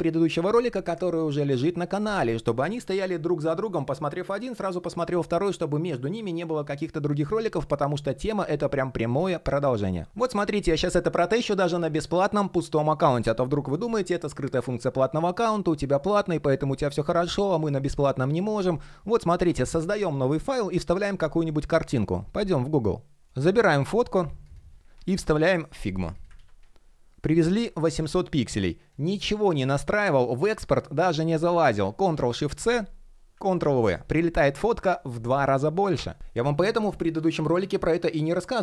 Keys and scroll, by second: 26.1 super+v, 31.9 shift+super+c, 33.3 super+v.